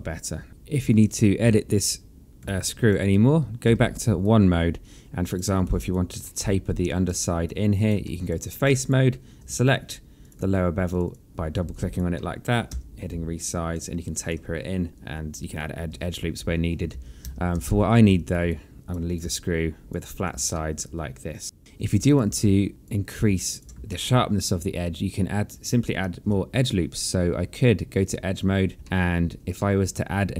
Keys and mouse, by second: 0.0 alt+middle click, 1.6 alt+click, 2.7 alt+middle click, 3.0 alt+click, 3.8 1, 4.4 right click, 5.8 alt+click, 6.4 alt+middle click, 7.2 alt+click, 7.6 right click, 8.2 alt+middle click, 8.8 alt+click, 10.3 click, 11.0 shift+click, 11.9 alt+click, 12.3 alt+middle click, 12.8 r, 13.6 click, 14.9 3, 16.0 1, 17.1 ctrl+z, 18.3 alt+click, 18.6 right click, 19.2 click, 19.4 alt+click, 20.7 alt+middle click, 22.1 click, 22.4 alt+click, 23.4 alt+click, 23.9 alt+middle click, 26.2 1, 28.0 click, 28.8 alt+middle click.